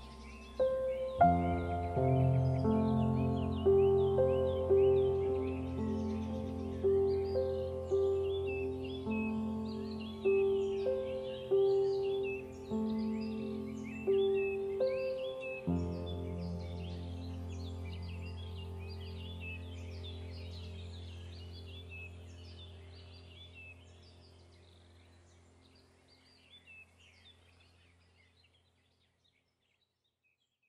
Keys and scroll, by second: 10.9 Caps_Lock, 12.4 shift+Caps_Lock, 13.6 Up, 29.2 BackSpace.